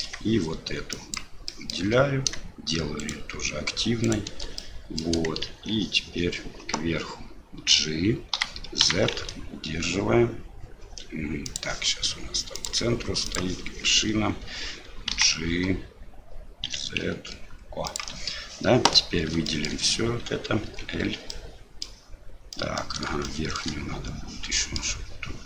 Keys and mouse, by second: 1.1 shift+right click, 1.5 shift+middle click, 3.0 shift+right click, 4.0 shift+right click, 4.6 middle click, 5.5 shift+z, 8.4 g, 12.7 click, 19.5 shift+click, 20.7 l, 21.4 middle click, 22.6 middle click, 23.4 shift+middle click, 24.7 middle click.